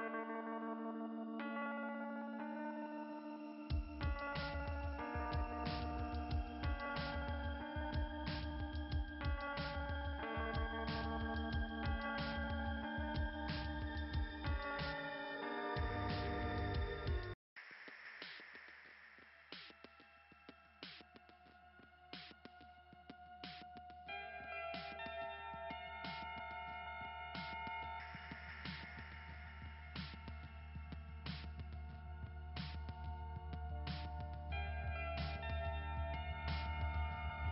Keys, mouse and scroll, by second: 7.1 click, 9.1 click, 17.2 right click, 17.4 right click, 18.5 click, 19.9 right click, 21.3 click, 23.3 click, 24.4 click, 27.0 click, 28.1 click, 28.8 click, 36.5 click, 36.8 click.